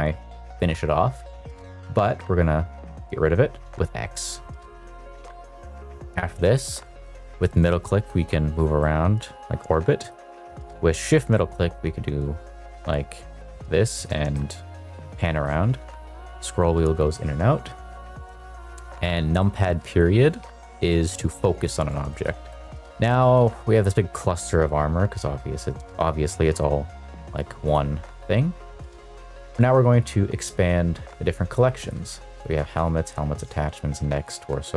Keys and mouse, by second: 2.9 x, 5.1 middle click, 6.4-6.8 shift+middle drag, 7.1 shift+middle click, 7.6-8.6 shift+middle drag, 8.7-10.0 middle drag, 10.9-14.0 shift+middle drag, 14.3-15.4 shift+middle drag, 18.6 KP_Decimal, 19.3 middle click, 20.4 middle drag, 20.8-21.3 middle drag, 22.0 shift+middle drag, 22.4 middle click, 22.7 shift+middle click, 22.7 middle click, 23.0 shift+middle drag, 23.3 middle click, 27.6 click, 30.0-31.3 drag, 31.8 click.